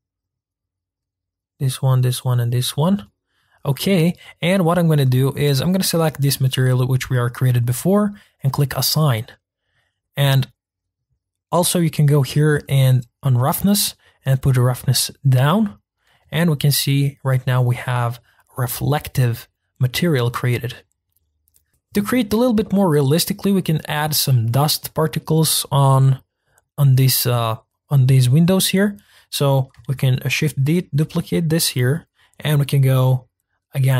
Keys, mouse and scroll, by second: 0.3 shift+click, 1.0 shift+click, 1.6 shift+click, 2.0 shift+click, 2.5 shift+click, 3.0 middle click, 3.4-3.9 scroll down 2, 3.9 middle click, 4.3-5.4 scroll up 2, 5.4-7.6 scroll up 1, 7.6 click, 8.8 click, 9.3-10.3 middle drag, 10.3-10.7 scroll up 2, 14.2-15.5 drag, 15.5 middle click, 16.2 Tab, 16.7-17.4 middle drag, 17.4-17.9 scroll down 2, 17.9-20.9 middle drag, 22.5-29.1 shift+middle drag, 29.1-29.9 drag, 29.9 shift+d.